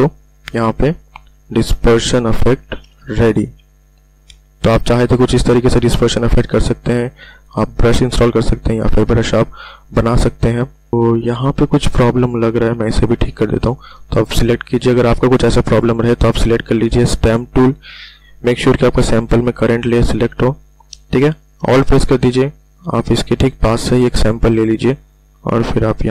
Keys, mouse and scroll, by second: 1.3 v, 2.1-2.6 ctrl+alt+scroll down 1, 3.1 Return, 3.9-4.3 ctrl+alt+scroll down 1, 7.1 v, 10.7 v, 10.9 ctrl+alt+scroll up 1, 11.4-11.8 ctrl+alt+scroll up 1, 14.5 s, 18.1 ctrl+alt+scroll up 1, 22.8-24.9 alt+drag.